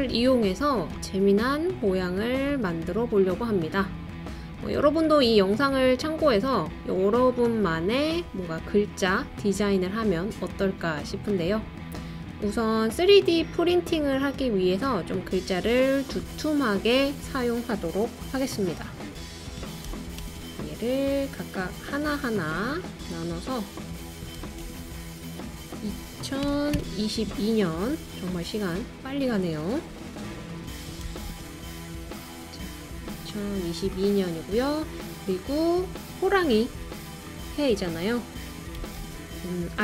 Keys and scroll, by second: 19.9 super+c, 20.2 super+v, 24.4 super+c, 24.6 super+v, 26.4 BackSpace, 26.8 0, 31.1 super+c, 31.2 super+v, 38.8 super+c, 39.0 super+v.